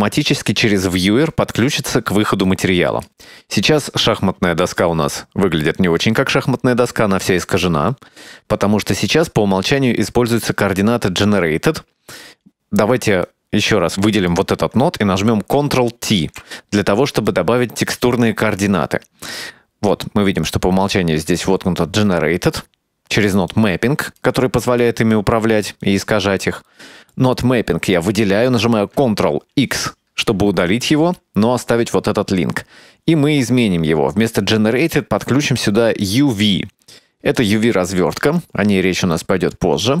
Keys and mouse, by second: 1.0-1.9 drag, 2.5-3.1 drag, 4.2 middle drag, 5.3-7.0 middle drag, 8.1 middle click, 12.2 click, 13.3-14.4 drag, 16.3 ctrl+t, 17.4 click, 18.1-19.3 middle drag, 23.6-24.3 drag, 24.8 click, 26.0 click, 26.8 middle click, 28.0 click, 30.5 ctrl+x, 35.6-36.5 drag, 37.4-38.1 shift+middle drag, 39.0-40.0 drag.